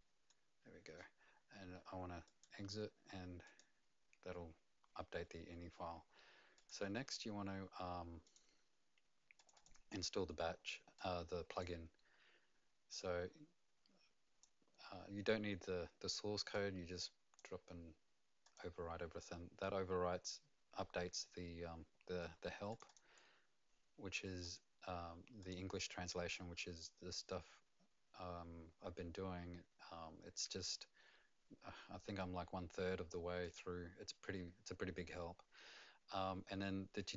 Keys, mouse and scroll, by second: 2.2 right click, 2.2 click, 3.4 click, 8.2 click, 9.3 click, 9.5 click, 10.9 click, 13.0 click, 16.5 click, 18.4 click, 22.7 click, 22.8 click, 25.4 click, 33.4 click.